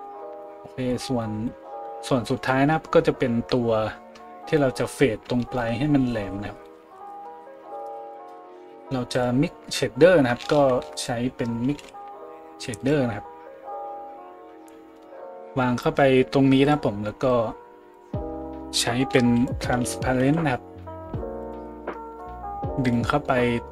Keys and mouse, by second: 7.8 shift+a, 9.2-17.4 middle drag, 10.5 shift+a, 17.4-22.9 drag, 19.0 shift+a, 22.9-23.7 middle drag.